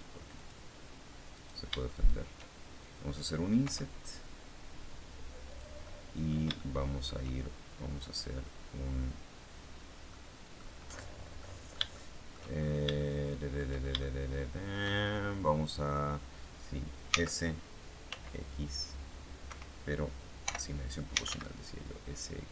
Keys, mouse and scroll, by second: 0.3 click, 1.2 right click, 1.8 shift+right click, 3.5 i, 5.4 click, 5.8 middle click, 6.4 shift+middle click, 7.2-7.6 shift+scroll up 1, 10.0 middle click, 11.3-12.4 middle drag, 12.5-12.9 shift+scroll up 1, 12.9 shift+middle click, 13.9-15.1 shift+middle drag, 17.0 s, 18.0 x, 19.4 Escape, 20.4-21.7 typing.